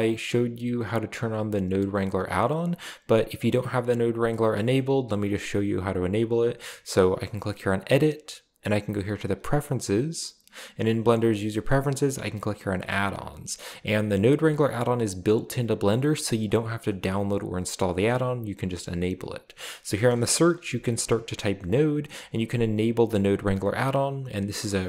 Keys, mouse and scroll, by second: 0.1 click, 3.4 click, 4.6 scroll up 2, 5.3 click, 5.7-6.2 drag, 7.9-8.6 drag, 9.5 click, 10.9 click, 12.9 click, 16.5 click, 16.9-17.4 drag, 19.6 click, 20.2-21.0 typing, 21.7 click, 23.3 click.